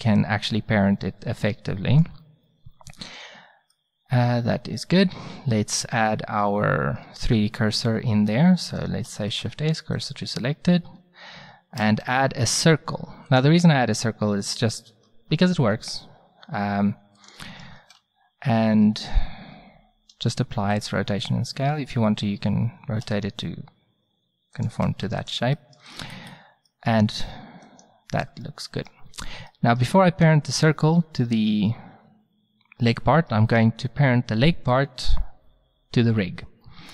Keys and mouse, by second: 0.8-3.8 middle drag, 5.8 shift+a, 9.1 shift+s, 11.8 shift+a, 15.6 s, 17.8 ctrl+a, 20.1 ctrl+a, 23.0 r, 24.9 ctrl+a, 27.7 click, 33.3-34.1 middle drag.